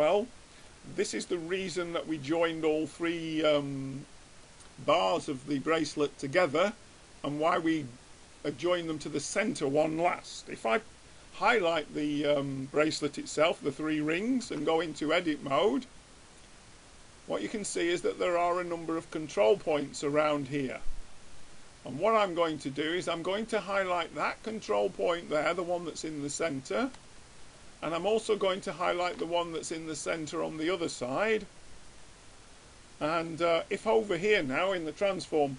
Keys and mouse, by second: 0.7-2.5 middle drag, 3.7-5.6 middle drag, 8.9-11.1 drag, 14.8 Tab, 15.3-17.5 middle drag, 18.5-23.5 drag, 23.7-27.1 middle drag, 27.2-28.9 middle drag, 28.9-30.5 drag, 29.7-31.3 middle drag, 32.3-34.1 middle drag.